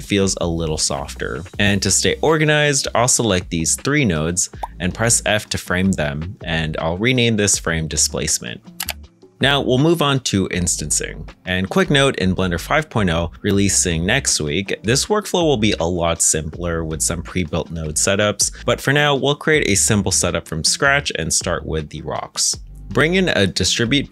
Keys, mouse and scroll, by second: 3.8 g, 4.5-6.2 scroll down 1, 6.2-7.6 typing, 6.6 ctrl+a, 7.6 Return, 9.8 g, 11.1-12.0 scroll down 1, 12.0 middle click, 13.0 g.